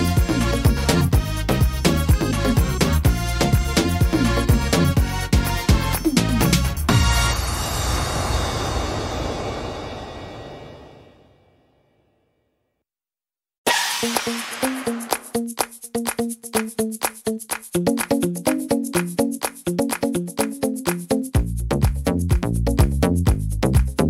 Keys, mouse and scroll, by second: 2.2 click, 2.2 middle click, 3.1 scroll up 2, 4.1 right click, 4.6 alt+shift+right click, 5.9 f, 6.3 middle click, 7.0 scroll up 3, 7.8 right click, 8.7 alt+shift+right click, 10.4 click, 13.9 shift+middle click, 15.1 click, 16.1 middle click, 16.9 scroll down 2, 17.3 middle click, 17.7-18.2 scroll down 2, 18.0 middle click, 18.6-19.2 scroll down 2, 19.0 middle click, 21.3 l, 23.9 click, 23.9 middle click.